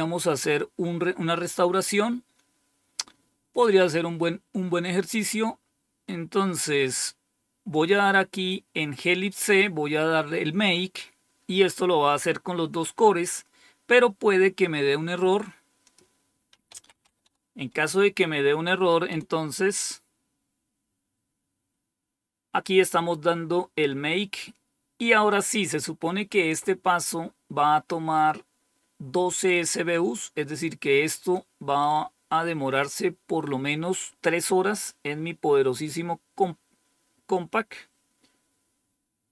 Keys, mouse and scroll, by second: 3.4 click, 4.7-6.1 scroll down 5, 7.6 click, 9.0-10.6 scroll down 3, 10.6 scroll down 1, 11.5-12.6 scroll down 2, 12.6 click, 14.5 scroll up 2, 15.7 click, 16.1 click, 16.4-17.6 typing, 19.0 Return, 27.3-28.9 scroll up 1, 29.8-31.3 drag.